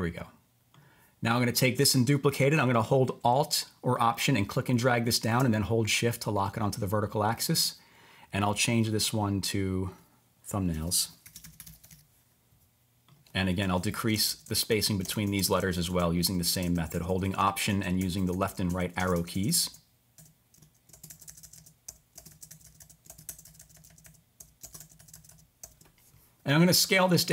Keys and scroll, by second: 8.4 t, 10.5-12.4 typing, 14.0 alt+Left, 14.1 alt+BackSpace, 14.3 alt+BackSpace, 14.7 alt+Right, 15.3 alt+Left, 15.4 alt+Left, 15.6 alt+Left, 16.2 alt+Right, 16.7 alt+Left, 16.9 alt+Left, 17.1 alt+Left, 18.0 alt+Left, 18.1 alt+Left, 18.3 alt+Left, 18.7 alt+Right, 19.1 alt+Left, 19.3 alt+Left, 19.5 alt+Left, 20.9 Right, 21.1 alt+Left, 21.3 alt+Left, 21.4 alt+Left, 21.9 alt+Right, 22.3 alt+Left, 22.5 alt+Left, 22.6 alt+Left, 23.1 Right, 23.2 alt+Left, 23.5 alt+Left, 23.6 alt+Left, 24.4 alt+Right, 24.8 alt+Left, 25.0 alt+Left, 25.1 alt+Left, 25.6 alt+Right.